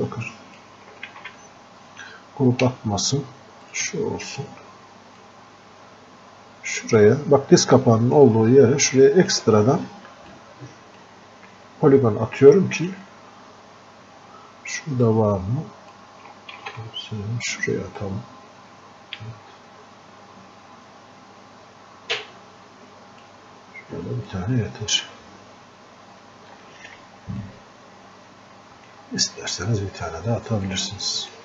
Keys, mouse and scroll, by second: 1.2 ctrl+z, 2.7 space, 5.2-8.3 drag, 8.3-10.3 drag, 10.3-12.4 drag, 12.4-15.0 alt+drag, 15.0-16.6 drag, 16.6 ctrl+z, 18.0-24.3 drag, 24.3 click, 25.4-26.0 scroll up 1, 26.6 alt+click, 27.4-30.7 drag, 30.7-31.4 drag.